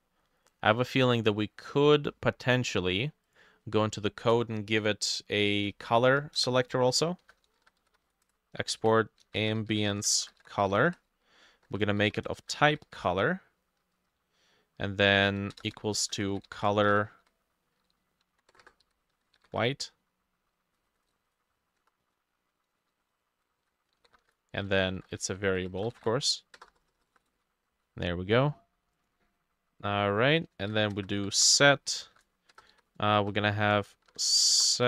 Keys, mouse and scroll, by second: 0.5 middle click, 1.5 middle click, 5.5 double click, 5.7 Return, 6.1 Up, 6.4 Return, 7.0-9.3 shift+drag, 7.0 shift+middle click, 7.0-13.5 typing, 11.9-15.0 shift+drag, 11.9 shift+middle click, 15.3-17.3 typing, 15.5 click, 15.8 shift+middle click, 16.4-20.8 drag, 16.7 middle click, 18.3 Right, 18.6-20.0 typing, 20.8 ctrl+middle click, 20.9 ctrl+shift+Left, 21.1 Caps_Lock, 21.3 w, 21.8 BackSpace, 22.1 shift+middle click, 22.5 Caps_Lock, 22.8 shift+middle click, 22.9-27.9 typing, 23.5 middle click, 30.6-32.8 typing, 30.9 Return, 31.2-32.5 drag, 31.6 shift+middle click, 34.0-34.8 typing.